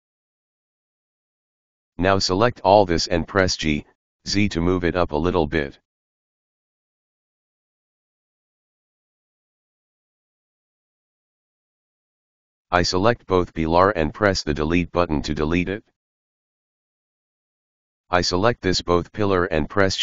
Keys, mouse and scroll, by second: 0.9 click, 4.5 g, 10.3 right drag, 10.5-11.9 middle drag, 11.9-12.9 scroll down 1, 12.9 click, 16.2 Delete, 17.3 click.